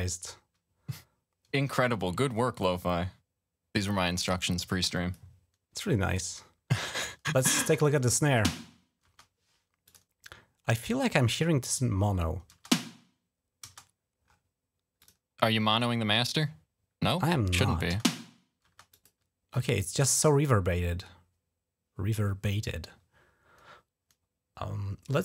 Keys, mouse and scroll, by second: 4.7 click, 5.9 click, 6.7 click, 8.0 space, 8.8 space, 9.7 click, 12.3 space, 13.4 space, 14.1 scroll up 2, 14.8 click, 17.8 space, 18.5 space, 18.7 click, 20.1 right click, 24.9 click.